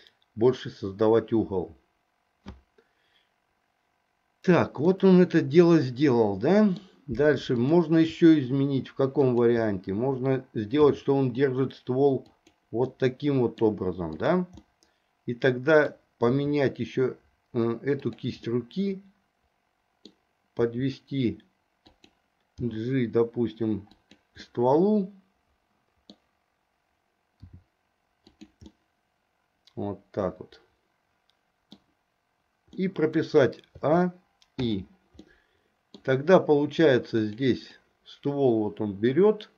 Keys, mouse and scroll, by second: 5.0-6.9 scroll up 1, 7.7 click, 10.9 r, 13.1 middle click, 14.3 click, 14.8-16.1 middle drag, 16.4 r, 18.6-20.3 middle drag, 20.8 r, 22.7 g, 24.6-26.3 middle drag, 27.5 r, 28.9-32.0 middle drag, 32.9 middle click, 34.0 a, 34.9 i, 35.4 middle click, 37.3 click, 38.0-39.5 drag.